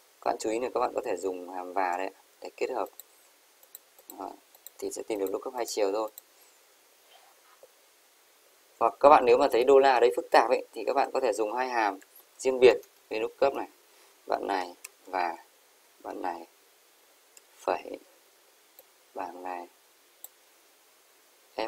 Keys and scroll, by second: 15.8 shift+Up.